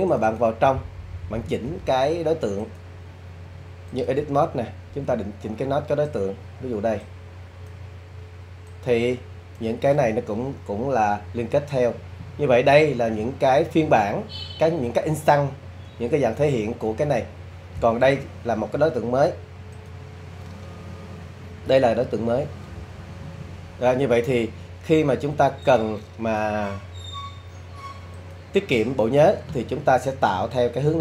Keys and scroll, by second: 22.0 super+z.